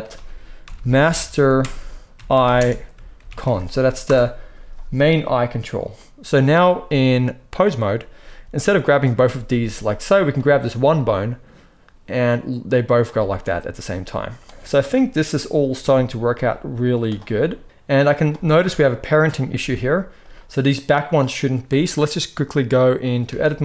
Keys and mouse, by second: 9.4 g, 10.1 click, 10.4-13.1 middle drag, 10.8 g, 14.2 click, 14.4 r, 15.5-17.0 drag, 16.2 r, 17.2 r, 18.6-22.3 middle drag, 19.5 r, 22.3-23.6 drag.